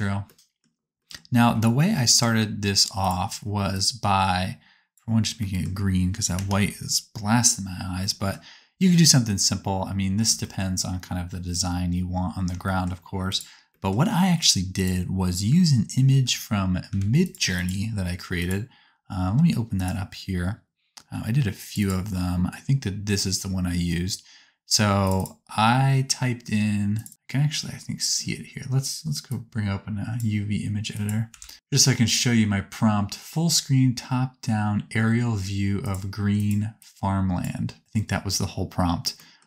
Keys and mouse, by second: 6.3 KP_0, 13.3 click, 13.3 right click, 14.4 click, 14.4 right click, 14.7 click, 14.7 right click, 16.1 ctrl+t, 16.9 g, 17.5 click, 17.5 right click, 18.4-25.2 drag, 18.4-25.2 right drag, 25.0 middle click, 26.9 click, 26.9 middle click, 26.9 right click, 29.3-37.8 drag, 29.3-37.8 middle drag, 29.3-37.8 right drag.